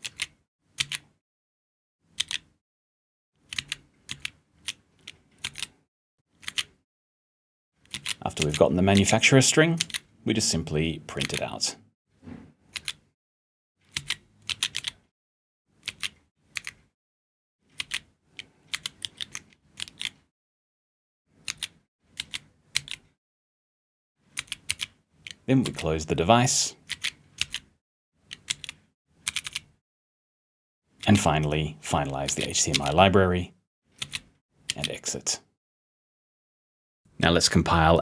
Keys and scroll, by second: 0.0 p, 0.8 b, 2.2 p, 3.6 g, 5.4 r, 6.4 *, 8.9 s, 9.8 b, 11.2 *, 12.7 r, 13.9-16.4 typing, 17.8-22.0 typing, 26.9 s, 27.4 b, 30.8-32.7 typing, 34.0 t, 37.0 p.